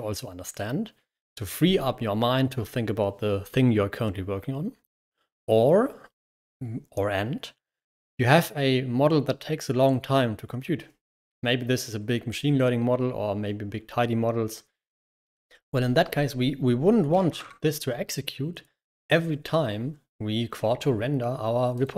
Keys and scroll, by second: 16.9-17.8 typing.